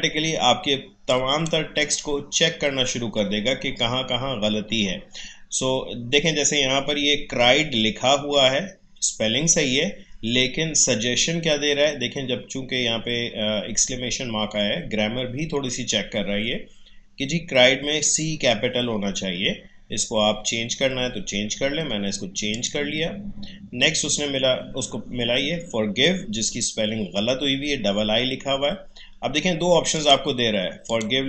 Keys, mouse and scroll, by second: 1.0-4.0 drag, 22.5 click, 29.9 click.